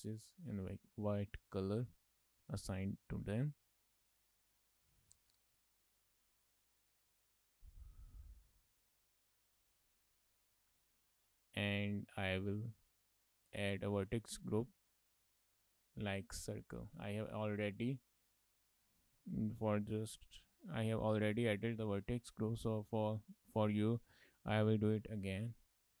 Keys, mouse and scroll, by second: 0.1 middle click, 1.3 shift+middle click, 1.5 middle click, 2.3 shift+middle click, 2.8 middle click, 3.5 scroll up 3, 3.7 shift+middle click, 4.1 middle click, 4.9-5.6 scroll up 4, 5.7 shift+middle click, 7.3 shift+middle click, 7.9 scroll down 2, 8.2 shift+middle click, 8.4 middle click, 10.6 scroll down 3, 10.9 shift+middle click, 11.1 middle click, 12.7 click, 15.3 click, 16.5 click, 17.6 click.